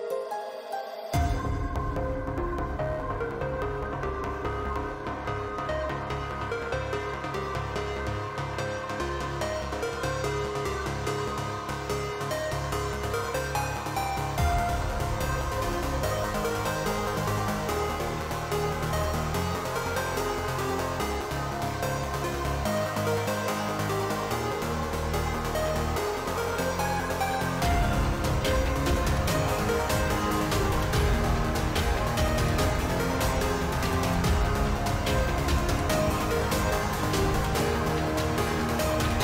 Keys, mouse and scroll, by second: 2.0 shift+middle click, 2.4 shift+middle click, 4.6 shift+middle click, 5.2 shift+middle click, 5.5 click, 6.6 g, 9.6 middle click, 9.9 shift+middle click, 10.5 shift+middle click, 10.9 shift+middle click, 11.3 shift+middle click, 12.2 g, 16.5 shift+middle click, 16.8 shift+middle click, 17.3 shift+middle click, 18.3 shift+middle click, 19.9 shift+middle click, 20.6 shift+middle click, 21.7 e, 25.8 shift+middle click, 26.3 shift+middle click, 27.0 click, 28.1 shift+middle click, 28.4 shift+middle click, 28.7 shift+middle click, 29.5 shift+middle click, 30.5 g, 34.1 shift+middle click, 34.3 shift+middle click, 34.7 shift+middle click, 36.2 g, 38.4 shift+middle click, 38.7 shift+middle click, 39.1 middle click.